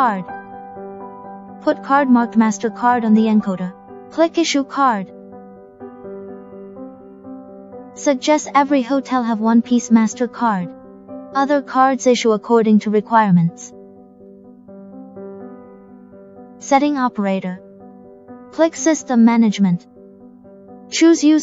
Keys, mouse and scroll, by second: 0.2 click, 6.0 click, 10.0 click, 14.8 click, 21.1 click.